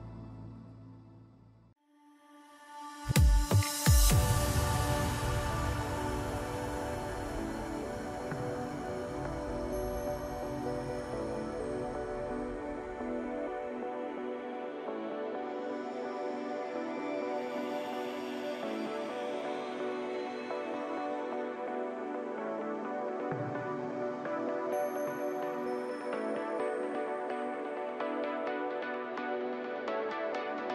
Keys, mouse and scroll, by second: 1.1-2.5 middle drag, 2.5-3.8 shift+drag, 4.8-5.9 middle drag, 5.9 shift+click, 7.1-8.1 shift+drag, 8.1-11.1 middle drag, 12.7 shift+click, 14.1 shift+drag, 15.3-18.7 middle drag, 18.7 shift+click, 20.3 shift+click, 21.8-26.5 middle drag, 26.5 e, 27.8 alt+s.